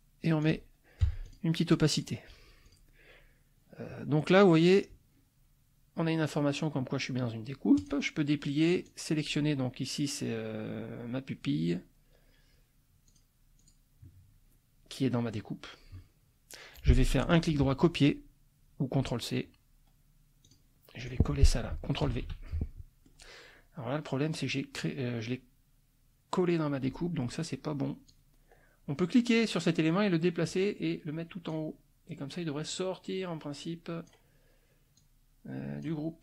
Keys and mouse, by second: 0.4 click, 1.0 F1, 1.3 click, 1.9 click, 2.6 click, 7.8 click, 8.9 click, 13.1 click, 13.6 click, 17.3 right click, 20.5 click, 21.0 click, 22.1 ctrl+v, 22.5 ctrl+click, 28.1-31.7 drag, 32.7-34.2 drag, 35.0-36.0 drag.